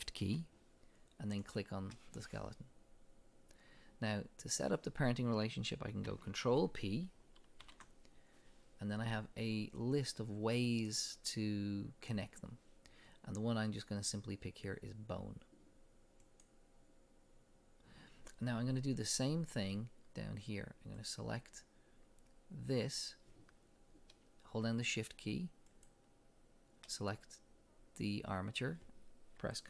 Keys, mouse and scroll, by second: 1.4 shift+click, 2.4-5.0 drag, 7.6 ctrl+p, 20.9 click, 25.7 shift+click.